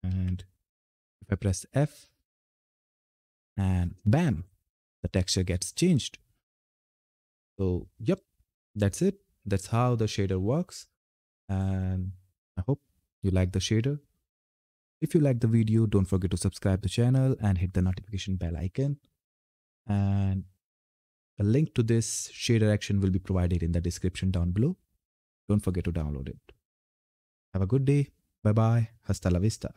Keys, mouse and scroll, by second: 1.5 f, 9.0-10.3 drag, 10.3-11.3 typing.